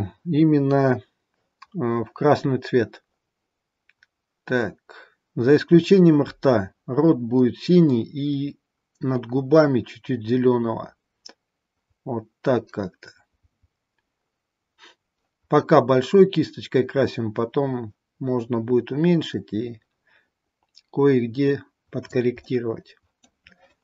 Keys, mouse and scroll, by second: 22.5 middle click.